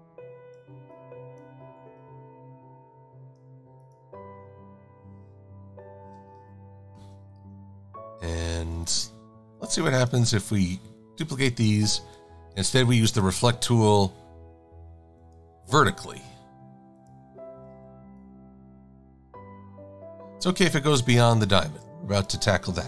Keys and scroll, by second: 21.8 shift+a, 22.6 a.